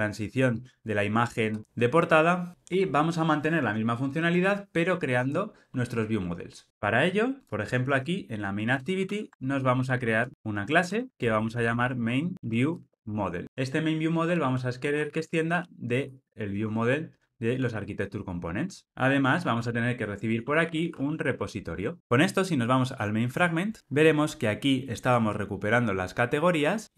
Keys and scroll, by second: 9.1 super+n, 16.4 Return, 21.8 Return.